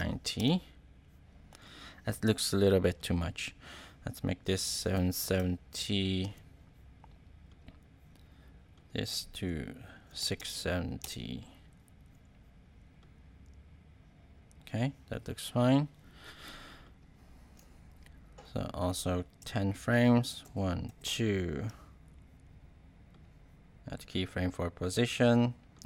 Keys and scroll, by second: 0.0-0.3 typing, 0.3 Return, 4.7 7, 5.2 0, 6.2 Return, 9.7-10.8 typing, 11.0 Return, 20.4 shift+Right.